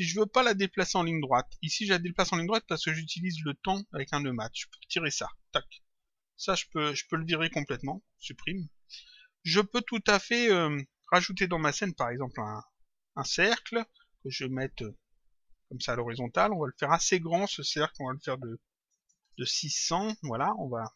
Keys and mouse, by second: 1.5 click, 3.0 click, 5.0 click, 6.6 click, 7.8 Delete, 10.0 click, 12.0 click, 14.5 click, 17.0 click, 19.2 Return.